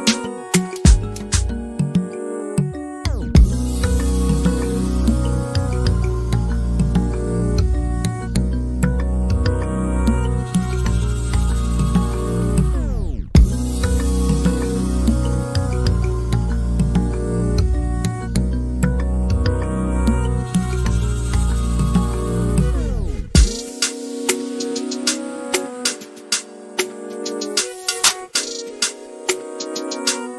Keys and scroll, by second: 1.0 m, 2.1-2.9 typing, 15.1 m, 19.1-20.4 typing, 22.0 Delete, 23.0 Delete, 23.8 ctrl+z, 28.3 m, 29.6 l.